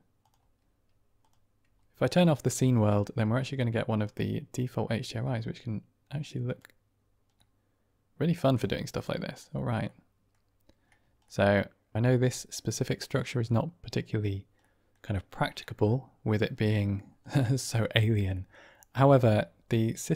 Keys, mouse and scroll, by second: 1.1-7.2 drag, 7.2-8.2 middle drag, 8.4 click, 8.9-9.4 middle drag, 9.9 middle drag, 11.2 middle click, 12.0-12.4 middle drag, 13.2-14.2 middle drag, 14.6 middle click, 15.6-15.9 middle drag, 16.3-16.8 middle drag, 17.2-17.6 middle drag, 18.2 middle drag.